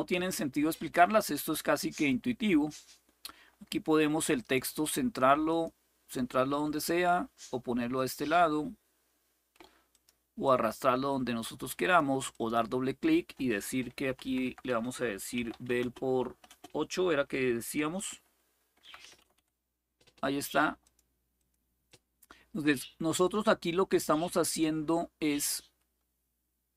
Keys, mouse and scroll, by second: 4.1 click, 5.2 click, 7.7 click, 9.6 click, 10.2-11.7 drag, 12.1 click, 14.2-16.2 typing, 17.7 typing, 17.9 Delete, 18.2 Delete, 18.4 Delete, 18.6 Delete, 20.6 click, 20.6 typing, 21.1 click, 21.6-24.4 drag.